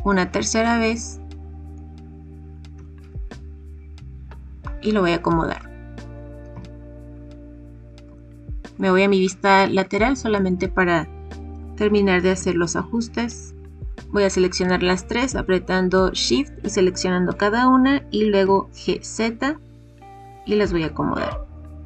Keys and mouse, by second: 1.3 click, 2.7 g, 2.7 y, 5.5 click, 6.4 KP_3, 8.1-8.7 shift+middle drag, 9.9-10.3 shift+middle drag, 11.5 g, 12.3 z, 17.9 g, 18.4 z.